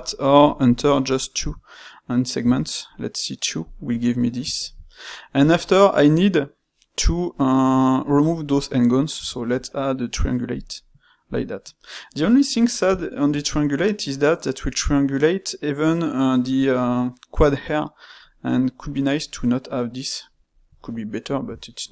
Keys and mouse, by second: 4.5-8.4 ctrl+middle drag, 12.2-16.4 middle drag, 20.7-21.9 ctrl+middle drag.